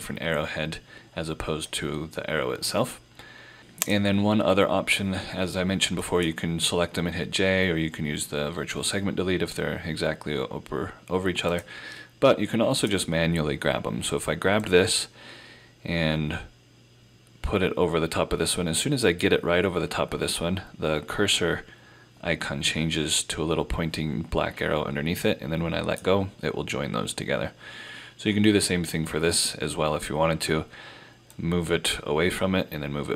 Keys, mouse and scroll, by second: 3.9 click, 27.2 scroll down 1, 27.9-28.2 scroll up 1, 31.4 click.